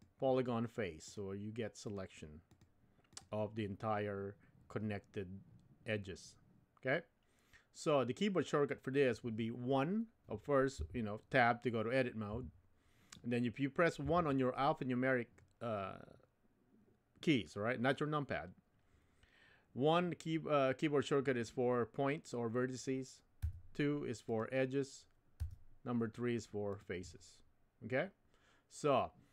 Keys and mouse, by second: 1.9 click, 2.5 click, 3.1 click, 10.8 Tab, 12.3 Tab, 14.0 1, 23.4 2, 24.2 click, 25.4 3, 26.7 click.